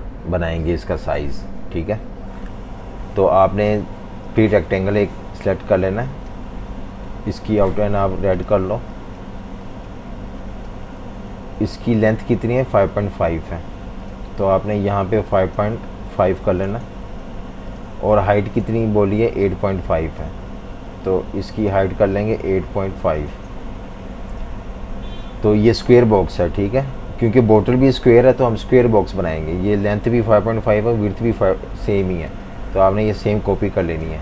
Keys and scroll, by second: 11.1 v, 15.8-17.3 typing, 22.2-23.4 typing.